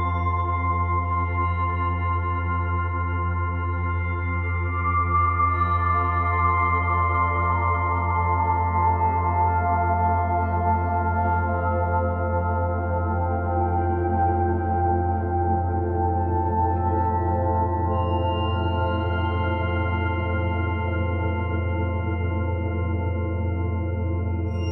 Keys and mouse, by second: 0.8-2.3 ctrl+alt+drag, 2.4-4.1 alt+drag, 4.2 g, 4.5 y, 5.2 click, 5.7 alt+click, 7.1 typing, 8.5 click, 8.9-11.7 alt+drag, 11.9-13.7 ctrl+alt+drag, 15.8 click, 16.7-18.4 drag, 18.7 g, 19.1 z, 21.9 shift+click.